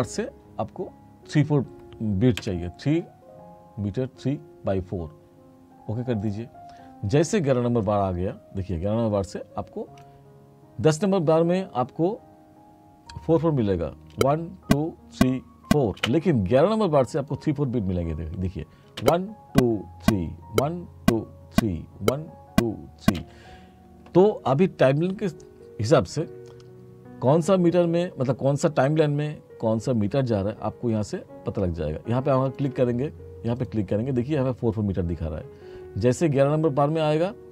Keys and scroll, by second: 2.5 3, 14.2 space, 16.1 space, 19.1 space, 23.1 space.